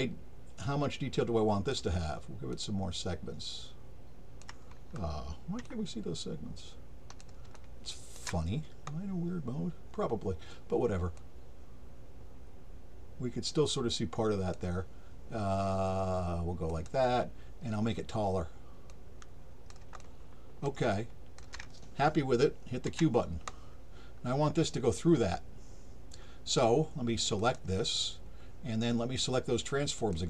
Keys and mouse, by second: 0.6-1.7 drag, 2.5-4.4 drag, 5.6-7.2 alt+drag, 7.5 alt+shift+click, 11.2-14.5 drag, 16.7 click, 18.9 click, 20.0 alt+click, 20.9 alt+shift+click, 27.4 click, 30.0 click.